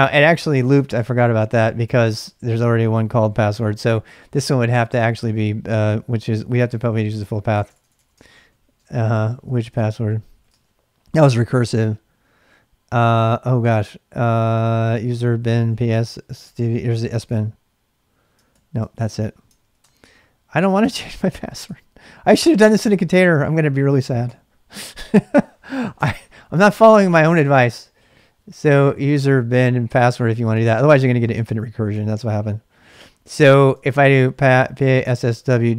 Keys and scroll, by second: 0.0-0.2 typing, 1.0 Return, 1.9 ctrl+[, 1.9 ctrl+j, 2.1-5.1 typing, 6.1 ctrl+a, 6.4 ctrl+[, 6.5 ctrl+k, 6.8-11.0 typing, 7.7 ctrl+a, 14.3-16.6 typing, 16.0 Return, 17.3 Return, 18.3-19.0 typing, 20.3-21.3 typing, 21.6 ctrl+c, 22.7-25.0 typing, 26.0 Return, 27.1 ctrl+[, 27.1 ctrl+j, 27.4-32.4 typing, 30.6 ctrl+[, 32.6 ctrl+[, 33.0 ctrl+[, 33.8 ctrl+c, 34.2-35.7 typing.